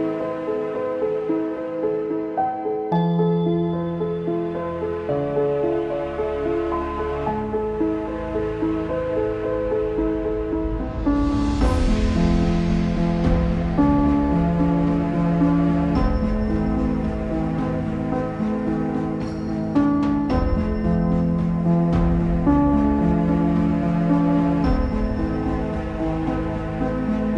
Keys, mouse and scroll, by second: 0.5 click, 1.2 click, 1.4-2.4 middle drag, 2.4-2.7 scroll up 2, 2.7-4.2 shift+middle drag, 4.2 click, 4.6-5.4 scroll up 1, 5.4 click, 6.9 click, 7.5 click, 8.3 shift+click, 8.5-9.8 shift+middle drag, 9.8 ctrl+j, 11.5 r, 13.0 click, 13.8 middle click, 14.4-14.7 scroll down 4, 15.1 shift+middle click, 15.4 scroll down 1, 15.7 middle click, 16.6-17.1 scroll up 2, 17.1 click, 18.7 click, 19.1 scroll down 3, 19.3 z, 19.6-20.8 shift+middle drag, 20.8 click, 22.7 shift+click.